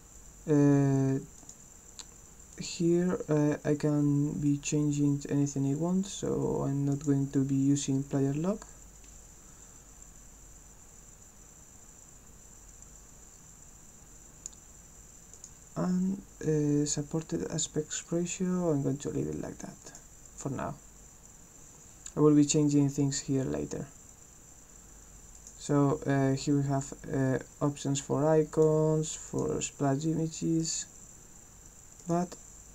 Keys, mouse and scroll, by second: 1.4 click, 2.5 click, 6.9 click, 15.3 click, 19.8 click, 25.4 click, 28.6 click, 29.3 click, 30.6 click, 32.0 click.